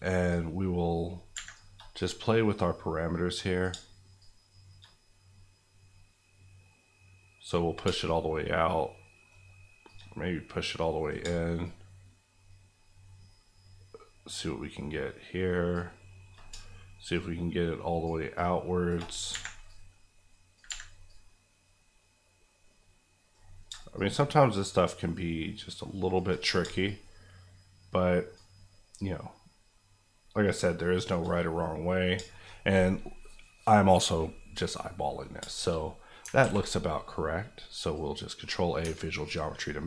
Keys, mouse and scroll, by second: 0.3 shift+click, 1.3 shift+Escape, 2.0 click, 9.9-14.2 shift+drag, 17.1 shift+Left, 19.1 Left, 19.3 Escape, 19.6 click, 20.6 Escape, 21.0-24.6 drag, 28.9 shift+click, 31.5 middle click, 32.7-33.0 scroll down 1, 33.0-35.2 middle drag, 35.7 middle click, 36.4 ctrl+a, 37.5 click, 38.4 middle click, 38.8 Tab, 39.2 scroll up 1.